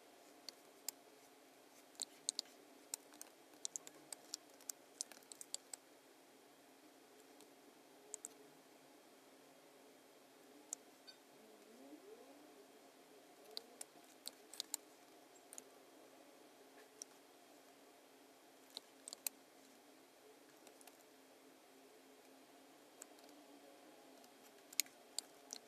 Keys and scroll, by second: 2.4 space, 3.2 super+-, 3.8 space, 5.1 super+=, 5.5 space, 13.5 space, 14.6 space, 19.1 space, 20.6 space, 23.2 BackSpace, 24.8 space.